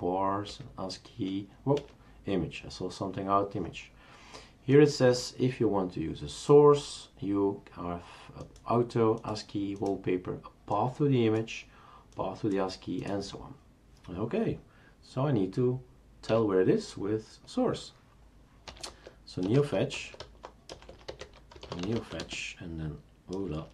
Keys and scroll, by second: 0.5 Page_Down, 1.7 Page_Up, 16.3 q, 18.4-23.7 typing.